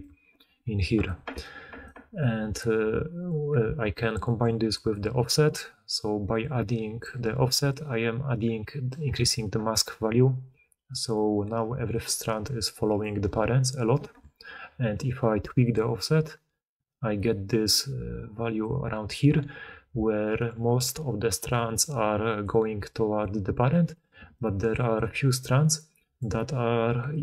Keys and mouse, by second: 1.0 d, 1.3 d, 1.8 d, 11.7-13.2 d, 14.0 d, 14.0 d, 21.6-24.2 d, 25.2 d, 26.2 d, 26.8 d.